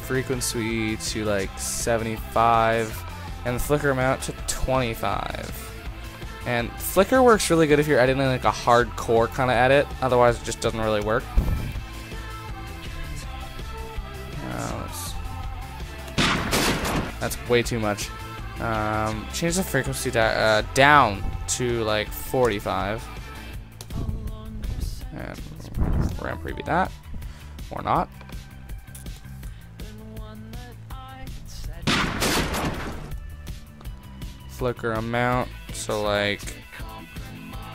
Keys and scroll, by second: 4.5 Return, 11.0 ctrl+0, 22.4 Return, 26.1 ctrl+0, 29.2 ctrl+0.